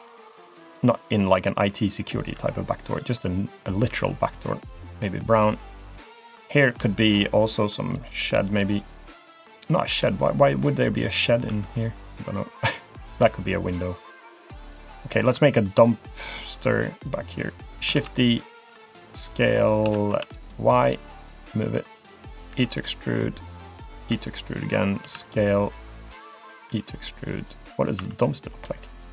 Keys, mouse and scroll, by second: 1.5 click, 2.3 e, 3.9 g, 5.9 middle click, 6.6 click, 7.0 shift+click, 7.4 click, 8.7 click, 9.1 shift+click, 9.9 i, 11.0 middle click, 11.5 e, 13.2 g, 14.6 click, 14.9 middle click, 15.5 shift+middle click, 15.9 middle click, 16.4 shift+middle click, 17.1 click, 17.9 shift+d, 18.6 s, 19.8 s, 21.7 click, 22.5 e, 23.8 middle click, 24.1 e, 25.0 s, 26.7 e, 28.0 2, 28.4 click, 28.9 click.